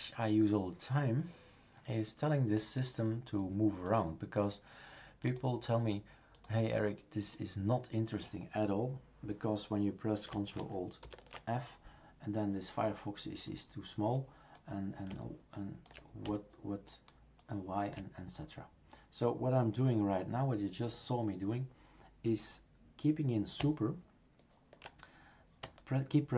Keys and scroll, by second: 11.0 ctrl+alt+f.